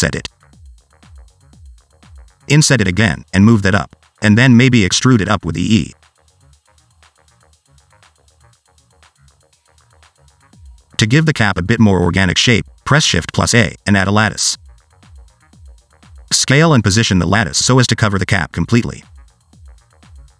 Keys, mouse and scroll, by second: 0.7 i, 2.1 middle click, 2.8 i, 4.4 click, 5.9 e, 7.8 alt+z, 8.4 i, 9.0 Tab, 10.3 click, 11.0 s, 11.7 click, 13.3 shift+a, 15.5 click, 16.0 s, 16.6 s, 18.2 click, 18.9 click, 19.4 s.